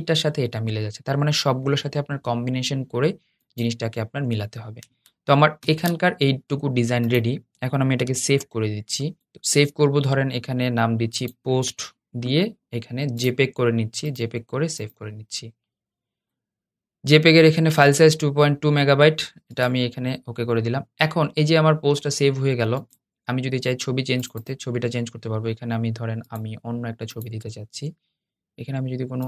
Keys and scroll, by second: 5.3 super+0, 7.8 shift+super+s.